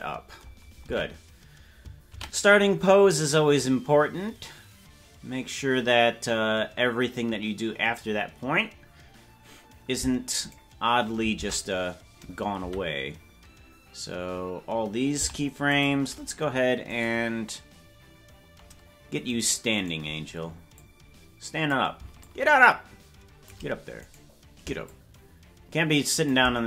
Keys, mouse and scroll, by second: 0.9 ctrl+Tab, 7.9-8.7 scroll down 4, 8.7 scroll down 1, 10.4 right click, 11.4 ctrl+Tab, 12.6 a, 15.1 i, 17.0 right click, 20.7-21.7 drag, 20.7 right click, 22.2-23.5 shift+drag, 24.1 right click, 24.8-26.3 shift+drag.